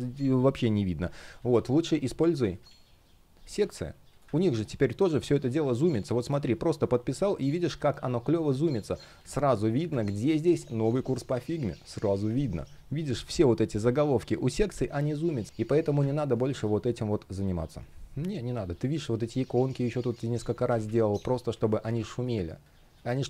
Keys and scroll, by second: 3.2 space, 8.9 space, 16.2 shift+p, 20.1 super+z, 21.5 space.